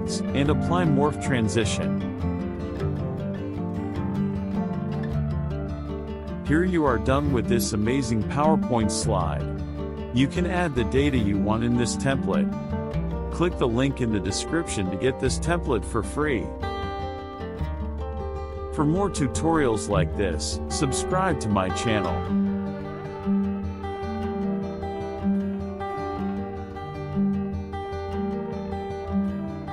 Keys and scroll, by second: 0.9 KP_Add, 5.3 KP_Subtract.